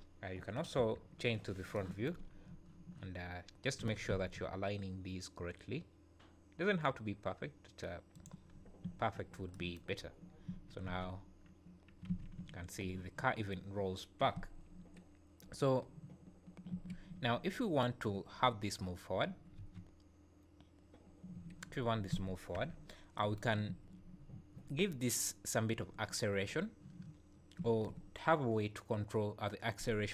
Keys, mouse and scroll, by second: 0.8 KP_1, 1.3 scroll up 4, 2.2 scroll up 3, 3.8 g, 8.5 scroll down 5, 8.8 `, 10.2 scroll down 4, 10.5 `, 10.9 space, 12.1 alt+a, 12.4 `, 16.7 Escape, 17.2 `, 19.6 space, 21.3 Escape, 23.1 KP_1, 23.7 `.